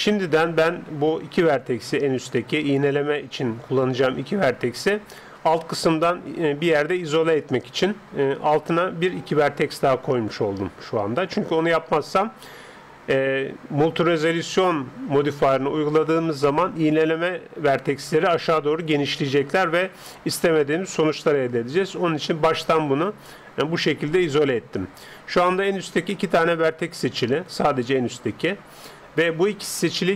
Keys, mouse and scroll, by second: 16.6-18.2 scroll down 1, 18.2-21.6 scroll down 1, 21.6-30.1 middle drag.